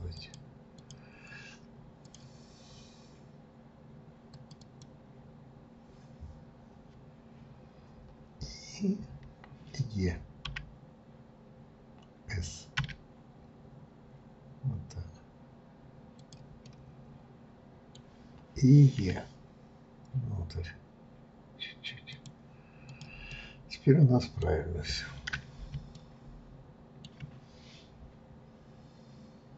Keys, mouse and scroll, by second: 0.1 click, 0.8 click, 2.0 click, 4.3 click, 4.6 click, 16.6-19.0 middle drag, 22.9 click, 23.3-24.9 middle drag, 24.9 scroll down 1, 25.9-29.0 shift+middle drag.